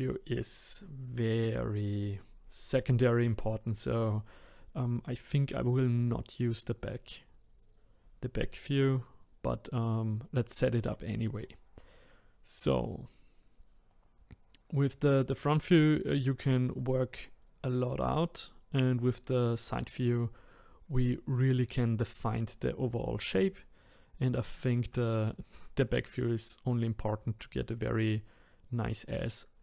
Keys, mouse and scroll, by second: 9.4-10.1 scroll down 2, 10.1-11.4 scroll up 2, 11.4-13.9 scroll down 1, 14.5-17.6 scroll up 1, 23.8 scroll up 2, 24.6-27.6 shift+middle drag, 29.5-29.6 scroll down 1.